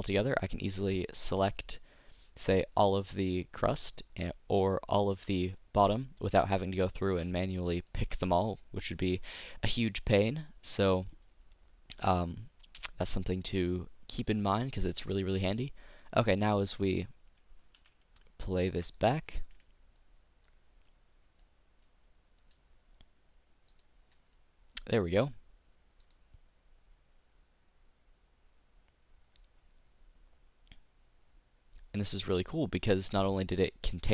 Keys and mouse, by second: 0.9-2.9 drag, 3.1-4.3 drag, 5.2 z, 5.8 click, 7.1 click, 7.1 z, 8.0 z, 17.8 a, 19.0-21.0 drag, 23.8 middle click, 24.0 click, 24.2 middle click, 25.1 click, 26.1-27.7 drag, 33.3 click.